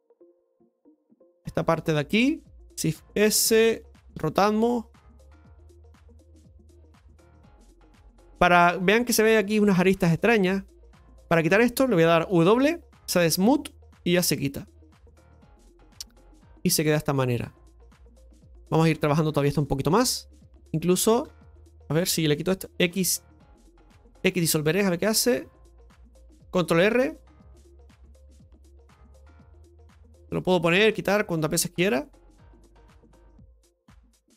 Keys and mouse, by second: 0.1-1.2 shift+middle drag, 1.2 right click, 1.7 alt+shift+right click, 2.8 shift+s, 6.4-7.9 middle drag, 16.1-17.6 middle drag, 17.9-18.5 shift+middle drag, 18.7 Tab, 19.5 middle click, 20.8 right click, 21.1 alt+shift+right click, 21.3 right click, 27.0 ctrl+r, 28.2 middle click, 29.4-32.7 drag, 32.7 middle click, 33.4-34.3 right drag.